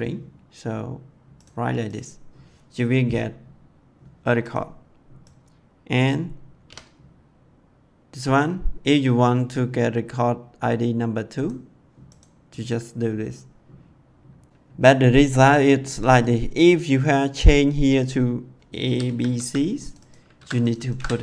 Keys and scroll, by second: 6.5 2, 18.7 a, 18.9 b, 19.3 c, 20.3 ctrl+c, 20.9 ctrl+v.